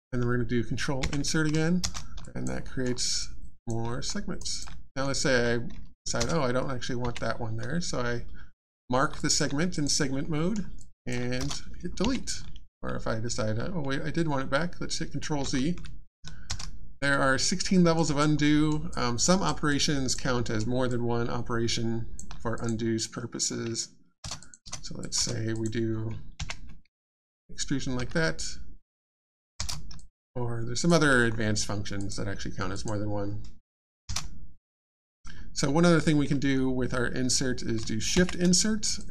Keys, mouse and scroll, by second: 1.8 ctrl+shift+space, 2.2 alt+click, 2.6 alt+middle click, 2.9 alt+scroll down 1, 3.2 alt+click, 4.1 alt+scroll up 1, 4.4 alt+click, 4.9 click, 4.9 alt+Tab, 6.2 space, 9.1 alt+click, 9.7 click, 9.7 click, 10.2 middle click, 10.8 click, 11.4 click, 11.4 alt+space, 16.2 ctrl+z, 16.4 shift+space, 17.9 alt+click, 18.4 alt+middle click, 18.9 alt+click, 20.3 alt+middle click, 20.9 alt+click, 22.5 click, 24.2 Tab, 24.2 space, 24.4 click, 24.6 space, 25.0 click, 25.1 space, 25.5 click, 29.5 shift+space, 29.9 alt+click, 31.2-32.0 scroll up 1, 32.0 click, 34.7 space, 39.0 alt+click.